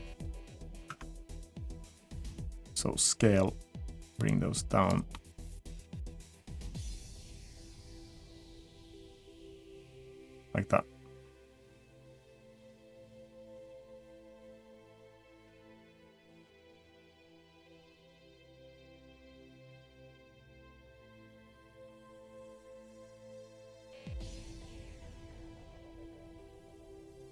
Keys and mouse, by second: 0.4 middle click, 0.9 Tab, 0.9 middle click, 2.8-4.7 drag, 4.9-5.4 middle drag, 8.1-9.7 drag, 9.9-11.0 middle drag, 11.2 middle click, 14.0-15.5 drag, 17.5-20.4 drag, 20.6-21.3 middle drag, 21.4 middle click, 22.6-23.9 drag, 24.4-27.3 drag.